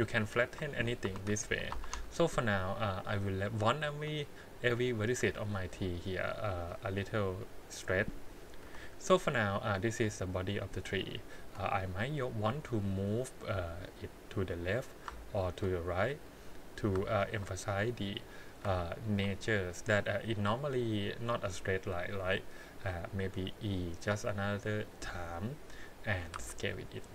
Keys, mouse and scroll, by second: 0.2 alt+click, 1.0 s, 5.1 g, 6.5 click, 6.8-8.0 middle drag, 8.0 scroll down 1, 8.6 KP_1, 11.2 alt+click, 13.5 click, 14.5 click, 15.4 alt+click, 16.1 click, 17.2 alt+click, 17.8 click, 19.0 alt+click, 19.7-21.4 drag, 23.3 e, 26.3 s.